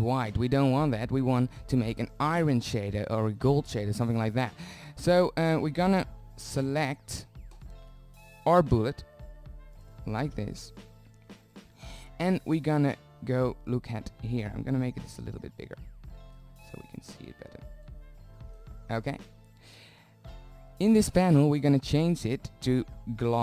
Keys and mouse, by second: 4.1 z, 4.6 z, 5.4-7.6 drag, 13.1 middle click, 22.7-23.4 drag.